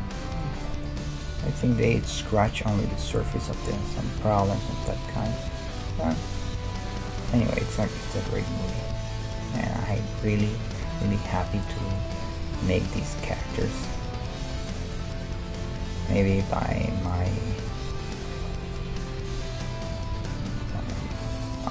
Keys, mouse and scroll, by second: 1.0 g, 1.0-2.2 right drag, 2.2 middle click, 2.8 right click, 3.6-4.8 middle drag, 3.7 g, 4.2 right click, 5.9 g, 7.4 g, 8.7 right click, 9.1 g, 9.7-12.3 middle drag, 12.3 right click, 12.3-17.5 middle drag, 14.1 g, 15.0-17.2 right drag, 17.5 e, 19.9 ctrl+Tab, 20.6 right click, 21.3 f.